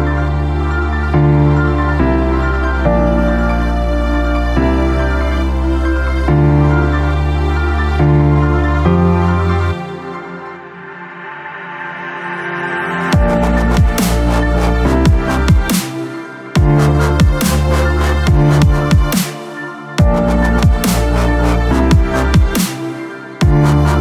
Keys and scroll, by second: 7.2 Return, 10.8 F6, 12.4 KP_2, 12.7 Return.